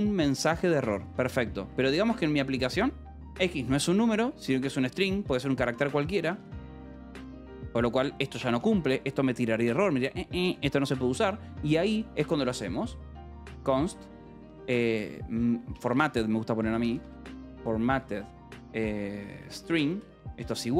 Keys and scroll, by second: 0.4 l, 1.1 a, 1.6 Escape, 1.9 k, 2.9 l, 4.6-7.8 typing, 9.0 shift+v, 9.6 Escape, 9.9 k, 10.5 a, 10.7 space, 11.9-20.4 typing.